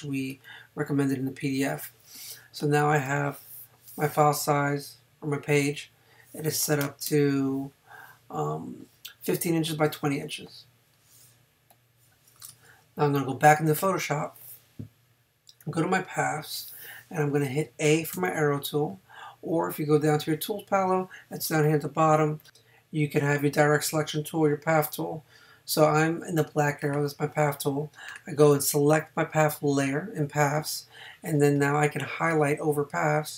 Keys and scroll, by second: 2.1 space, 7.1 Return.